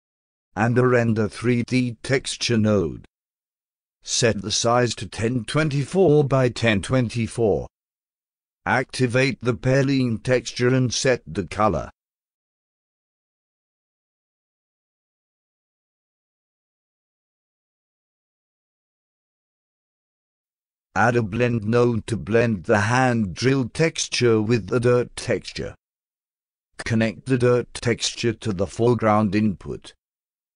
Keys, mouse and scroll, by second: 0.8-2.5 drag, 3.5 click, 3.9-6.3 typing, 7.4 click, 9.0 click, 9.3 click, 9.6 click, 10.3 a, 12.3 click, 12.7 click, 13.2-15.9 typing, 16.1 click, 16.5 click, 17.0-19.2 typing, 20.4 click, 21.3 click, 22.1 click, 28.8-29.9 drag.